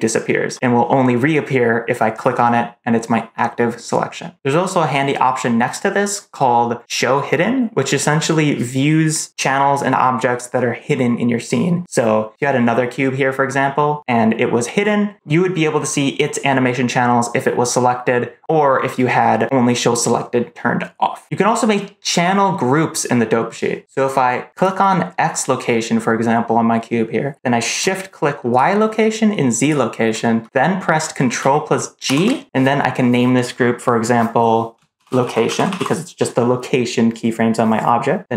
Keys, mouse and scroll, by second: 2.0 click, 24.5 click, 28.4 shift+click, 29.5 shift+click, 31.9 ctrl+g.